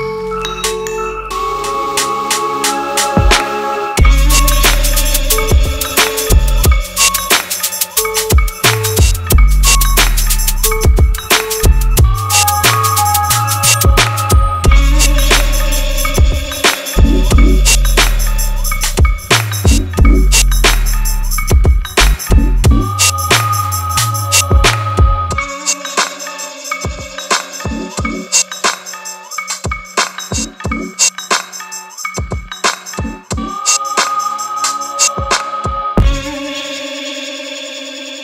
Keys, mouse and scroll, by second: 7.7 click, 8.5 shift+click, 8.9 right click, 9.9 click, 11.9 ctrl+t, 12.9-14.0 drag, 18.6-23.9 drag, 34.3 ctrl+t, 35.5-36.4 drag.